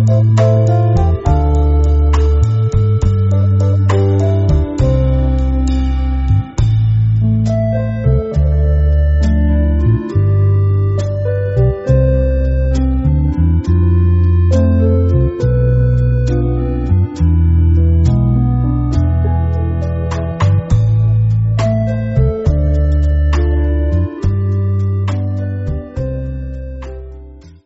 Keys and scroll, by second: 1.3 typing, 6.6 space, 7.1 alt+super+space, 7.2-8.0 alt+super+space, 9.2 space, 9.6 space, 12.6 super+2, 13.1 space, 13.6 super+space, 13.7-14.5 super+space, 15.8 Tab, 17.6-18.5 space, 19.9 space, 20.4-22.6 alt+super+space, 23.9 space, 25.1 super+space, 25.2 super+space, 25.3 super+space, 25.4 super+space, 25.9 super+space, 26.0 super+space.